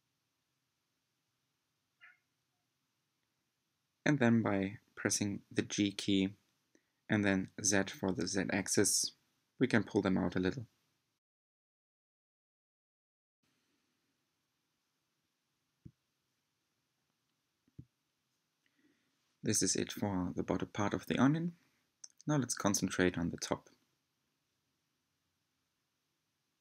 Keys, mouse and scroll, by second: 0.6 shift+click, 1.6 shift+click, 2.1 shift+click, 2.9 shift+click, 3.8 shift+click, 4.8 scroll down 2, 5.5 shift+click, 6.1-8.5 middle drag, 8.5 g, 12.9 s, 15.5 scroll down 1, 15.7-17.2 middle drag, 17.2 Tab, 17.8-19.6 middle drag, 19.6 scroll up 3, 20.1-22.1 middle drag, 22.1-22.8 scroll down 2, 23.4-25.1 middle drag, 25.1 Tab, 26.4-26.6 middle drag.